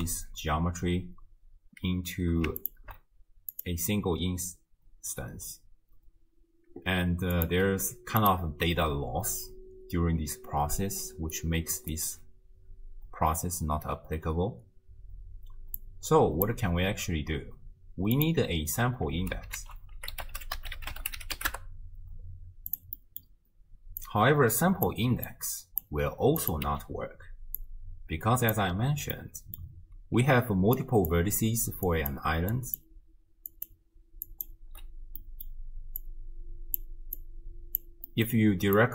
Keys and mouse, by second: 2.6 ctrl+shift+click, 7.4 click, 7.9 g, 11.0 d, 11.4 click, 12.0 d, 12.1 d, 12.9 d, 15.8 click, 18.2 click, 19.1 ctrl+x, 19.6 ctrl+a, 23.1 click, 24.2-24.9 drag, 25.5 click, 26.4 click, 27.7-28.6 drag, 29.3 click, 30.2-35.3 typing, 30.9 click, 31.9 click, 35.3 click, 36.2 click, 37.3-37.8 drag, 38.2 middle click, 38.8-38.9 drag.